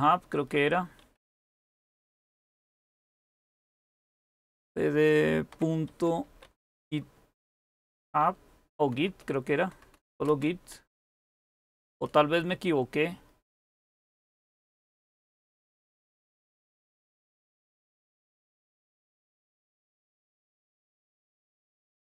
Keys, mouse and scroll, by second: 0.0-1.5 typing, 4.1-4.5 typing, 5.9-10.0 typing, 11.3-12.1 typing, 16.1-16.8 typing, 19.9-22.1 typing, 21.7 Return.